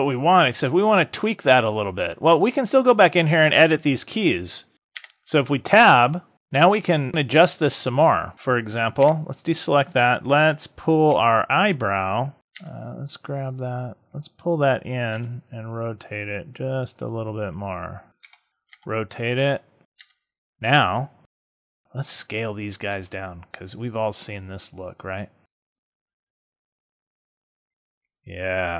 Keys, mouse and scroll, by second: 4.9 Tab, 8.9 a, 11.0 l, 12.4 g, 14.1 click, 15.0 r, 17.0 click, 18.1 l, 18.4 a, 18.6 r, 19.8 click, 19.9 g, 21.2 a, 21.6 l, 22.8 s.